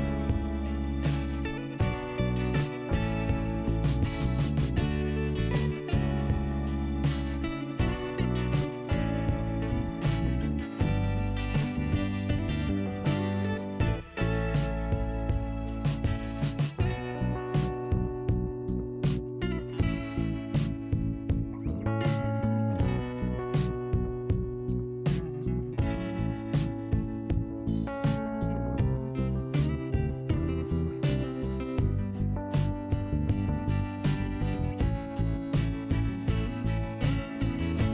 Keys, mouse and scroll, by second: 1.1-1.4 scroll down 2, 3.3 scroll down 1, 4.5 scroll down 1, 5.4 click, 6.6 scroll up 2, 7.5 click, 9.4 click, 9.6 click, 10.8 click, 13.5-14.3 scroll up 1, 14.3 click, 14.9 scroll up 1, 16.6 click, 17.5 click, 18.3 click, 21.1 click, 22.9 click, 25.1 click, 26.3 click, 27.5 scroll down 1, 28.7-30.2 scroll down 2, 28.8 click, 30.2 click, 32.2 click, 33.4 click, 33.6 click, 35.7 click, 36.9 click.